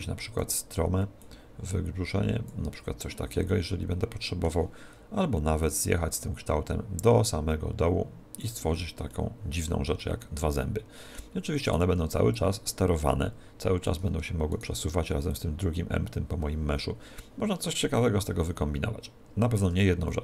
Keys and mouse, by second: 1.3 click, 3.5-5.7 middle drag, 5.7 click, 9.1-11.8 middle drag, 11.7 right click, 12.3 click, 14.5 right click, 15.3 click, 20.1-20.2 middle drag.